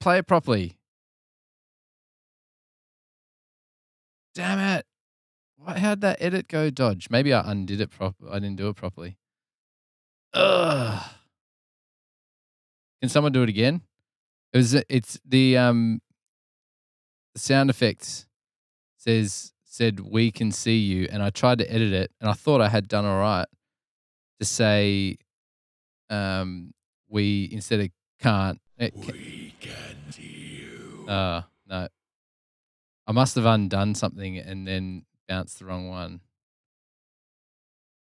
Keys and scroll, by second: 1.1 super+Tab, 2.4 super+Tab.